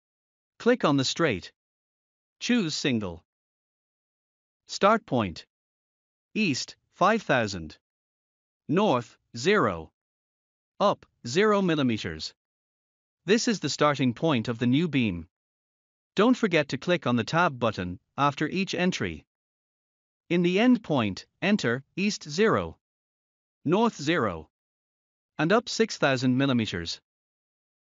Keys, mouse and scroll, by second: 6.7 typing, 8.4 typing, 10.6 Tab, 11.5 typing, 13.7 Tab, 14.1 typing, 15.9 Return, 23.4 0, 24.5 Tab, 26.3 0, 27.0 Tab.